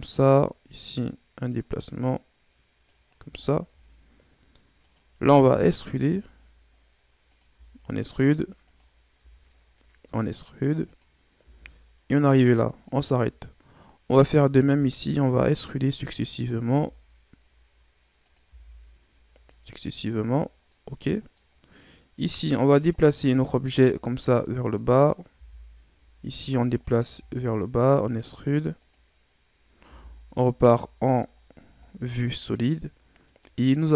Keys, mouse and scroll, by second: 0.2 right click, 1.9 right click, 3.1 scroll down 2, 3.7-4.7 scroll up 1, 4.7 right click, 5.2 e, 7.5 e, 11.3 e, 14.1 right click, 14.6 e, 16.6 e, 20.7 middle click, 21.6-22.4 scroll up 2, 22.4 click, 23.2 e, 25.3 e, 26.9 e, 29.8 z, 30.3-31.3 middle drag, 31.3-31.7 scroll down 1, 31.9-32.3 scroll down 3, 32.3 middle click, 33.2 right click.